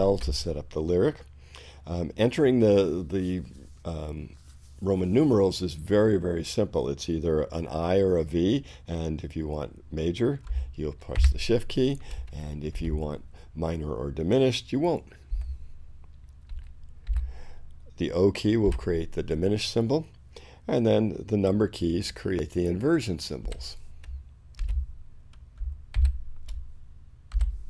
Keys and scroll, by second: 11.1 shift+i, 12.7 shift+space, 15.3 v, 16.5 i, 18.6 o, 23.5 6, 24.7 space, 25.7 shift+space, 26.0 shift+i, 27.4 shift+6.